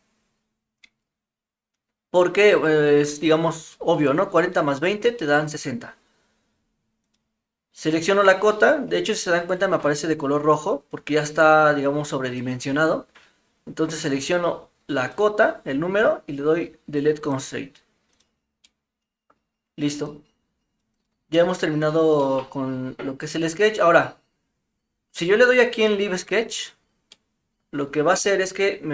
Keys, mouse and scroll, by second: 7.1-9.0 drag, 15.2 click, 18.6-19.3 middle drag, 20.1-20.8 drag, 21.3-21.8 middle drag, 22.2 middle drag, 26.3 click, 27.1-28.9 middle drag.